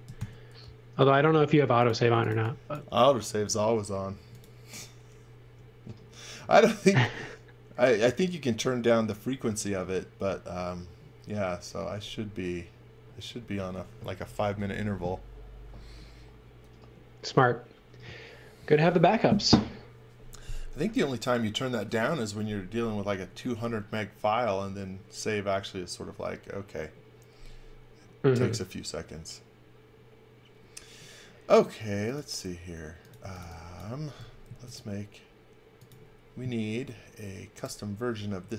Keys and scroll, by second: 0.2 super+s, 1.8-2.8 typing, 4.1 space, 5.4 m, 33.0-34.1 typing, 36.7 space.